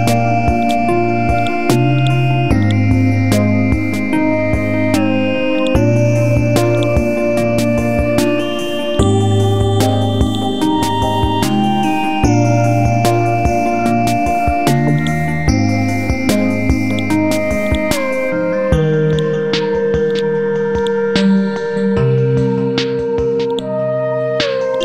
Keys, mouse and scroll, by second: 2.6 right click, 5.6-8.2 drag, 8.4 Delete, 8.9 right click, 10.2 click, 19.1 right click, 20.1-24.8 drag.